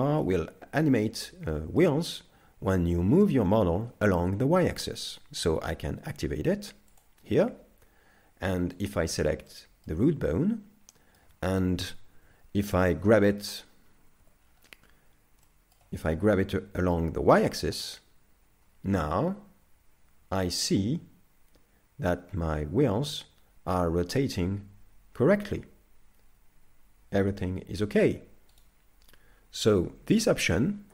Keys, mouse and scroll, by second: 0.6-1.2 scroll down 2, 1.2 shift+middle click, 6.9 click, 8.8 right click, 9.5 middle click, 10.9 middle click, 11.8 KP_5, 12.2 KP_5, 14.2 KP_5, 14.4 scroll down 6, 15.4 shift+middle click, 16.0-16.4 scroll up 2, 16.4-17.2 scroll down 1, 17.2 g, 29.7 KP_3.